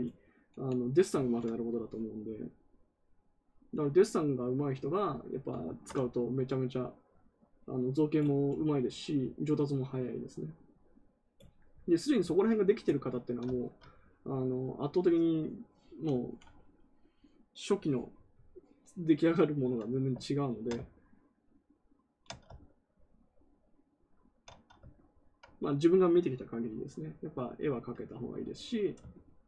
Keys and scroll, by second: 20.4 ctrl+z.